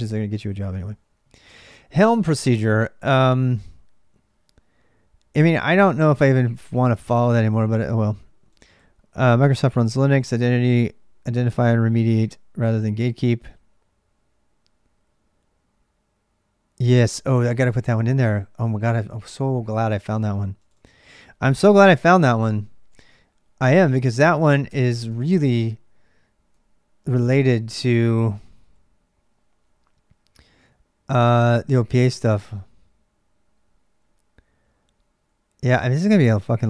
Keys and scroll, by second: 0.0-36.6 typing, 24.5 Tab, 24.9 Return.